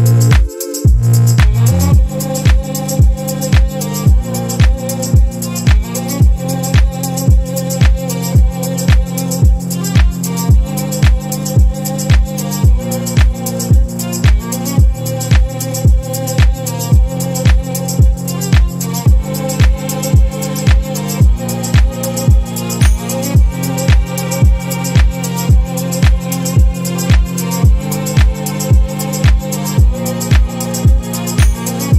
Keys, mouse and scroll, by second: 0.4 click, 1.4-3.0 drag, 3.7-5.5 drag, 6.9 click, 8.6-11.5 ctrl+drag, 13.9-15.8 drag, 16.2-17.2 ctrl+drag, 20.9 click, 21.6 space, 23.1-24.7 drag, 25.8 click, 26.4 click, 27.2 click, 28.2-30.6 drag, 31.3 click.